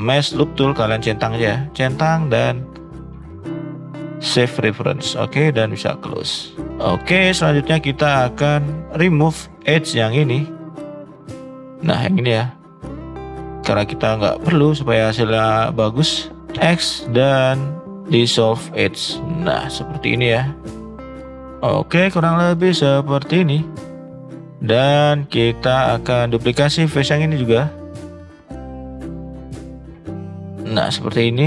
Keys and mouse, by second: 6.3-7.7 middle drag, 8.4 middle click, 10.7 middle drag, 12.3 alt+shift+click, 12.8 middle drag, 13.7 shift+middle drag, 14.2-14.6 middle drag, 14.8 middle drag, 15.8 middle drag, 16.5 x, 19.1 middle click, 19.8-21.5 middle drag, 21.9-22.2 middle drag, 22.9 middle drag, 23.8 middle click, 24.2 shift+middle click, 24.3 middle click, 24.8 shift+middle click, 25.1 middle click, 26.6 shift+middle click, 27.1 click, 28.2 click, 30.0 shift+click, 30.9 middle click.